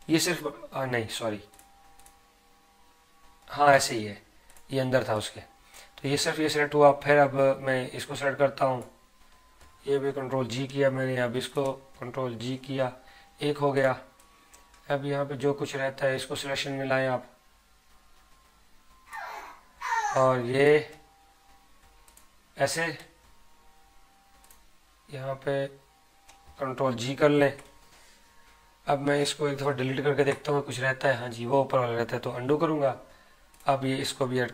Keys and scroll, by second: 10.4 ctrl+g, 27.4 ctrl+g, 32.6 ctrl+z.